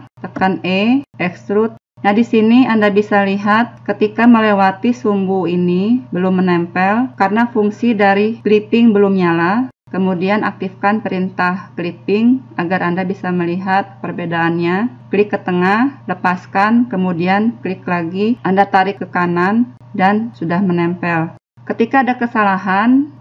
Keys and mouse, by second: 0.5 e, 1.8 e, 7.1 click, 12.1-15.3 drag, 16.5-18.4 drag, 22.9-23.2 drag.